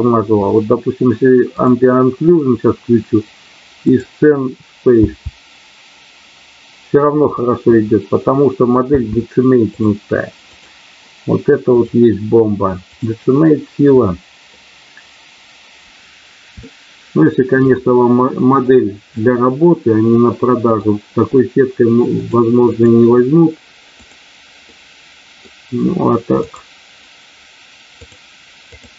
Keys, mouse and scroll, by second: 1.5 click, 3.9 click, 4.9 space, 8.9 space, 11.6 click, 16.5 shift+middle click, 19.1-20.9 middle drag, 22.1 click, 22.7 click, 24.0 click, 24.6 middle click.